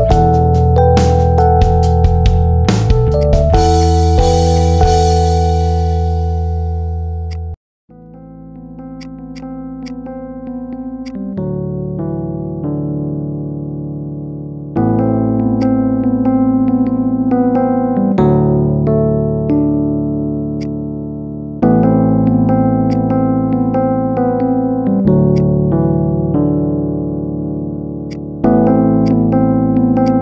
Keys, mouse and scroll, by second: 2.3-3.1 scroll down 13, 3.1 click, 4.4-6.8 drag, 7.2-7.9 drag, 7.9-8.3 scroll up 3, 8.3 middle click, 8.9 click, 9.3-10.3 drag, 10.3 middle click, 11.0 click, 11.6-12.0 scroll down 1, 12.0 middle drag, 12.3-12.9 scroll up 2, 12.9-13.6 scroll down 2, 13.6 KP_7, 13.9-14.5 scroll down 2, 14.5 g, 15.7-16.2 middle drag, 16.2-16.7 scroll up 5, 16.7-18.1 middle drag, 18.1 scroll down 5, 18.5 KP_7, 19.1 g, 20.7-21.9 middle drag, 21.9 r, 23.0-23.5 scroll up 5, 23.5-25.0 middle drag, 25.3-26.6 drag, 26.6 scroll up 1, 26.7-27.5 middle drag, 27.5-27.9 scroll down 1, 27.9-29.5 drag, 30.0 click.